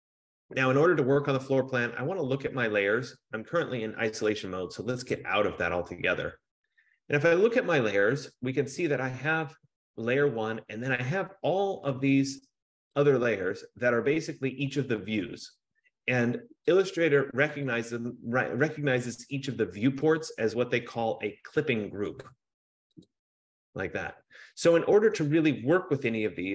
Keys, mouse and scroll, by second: 1.6 click, 4.5 click, 5.2 click, 9.5 click, 13.2 click, 14.8 click, 16.9 click, 17.8 click, 19.6 click, 20.4 click, 22.5 click, 23.3 click.